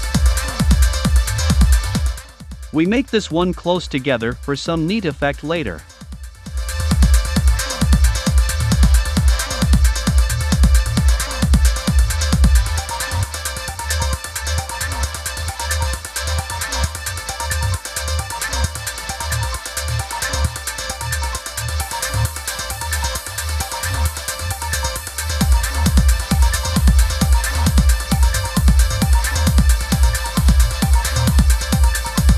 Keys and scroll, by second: 7.8 super+c, 8.3 super+v, 15.7 super+c, 16.3 super+v, 25.6 a.